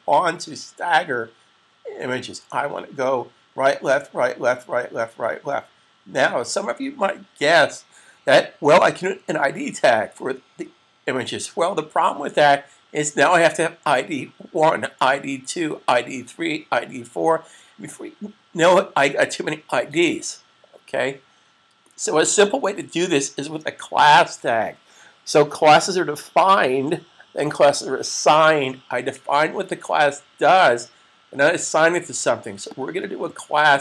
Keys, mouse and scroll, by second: 32.5 click.